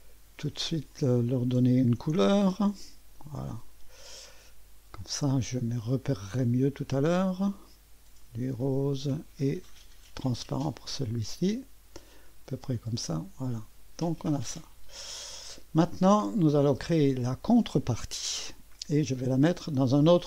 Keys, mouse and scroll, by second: 0.9 click, 2.5 ctrl+d, 3.7 click, 7.3 click, 8.4 click, 9.5 click, 11.3-12.5 drag, 12.8-14.5 drag, 15.3 click, 16.6 click.